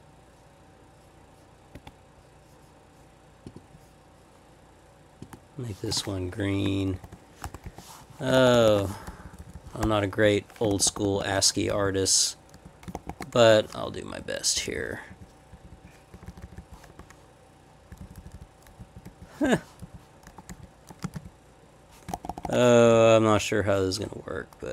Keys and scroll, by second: 6.9-8.7 typing, 9.0 Up, 9.1 Left, 9.2 Left, 9.4 Left, 9.5 Left, 9.8 /, 10.2 Up, 10.7 shift+-, 11.6 Down, 11.7 Left, 11.8 Left, 12.6 Left, 12.9 shift+-, 13.1 shift+-, 13.3 ., 14.1 Down, 14.6 Down, 14.7 Left, 15.1 Down, 15.5 Down, 16.1 Up, 16.9 /, 17.9 Down, 18.0 Left, 18.8 Right, 19.0 Down, 19.4 \, 19.8 Right, 20.2 Left, 20.5 Up, 20.9 Left, 21.0 space, 21.1 Down, 22.1 shift+-, 22.4 shift+-, 22.9 Up, 22.9 Left.